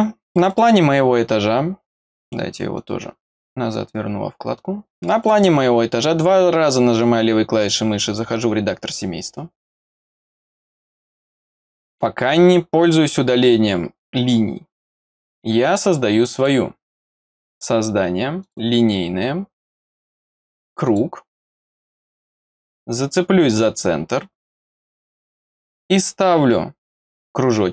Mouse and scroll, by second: 0.3 click, 2.7 click, 5.2 click, 5.3 click, 9.6 middle click, 9.6-10.2 scroll down 1, 10.2 click, 11.5 click, 16.3 click, 17.5 click, 18.4 click, 20.8 click, 23.5-27.7 drag.